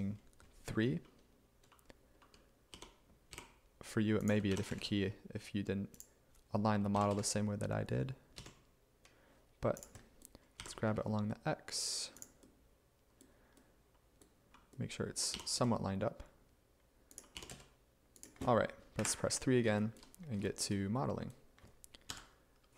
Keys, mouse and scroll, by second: 0.0-0.3 typing, 1.3-3.4 typing, 4.6 g, 4.8 z, 7.0 g, 7.2 x, 8.4 x, 10.6 g, 10.9 x, 15.4 g, 15.6 x, 17.4 g, 19.0 3, 22.1 5.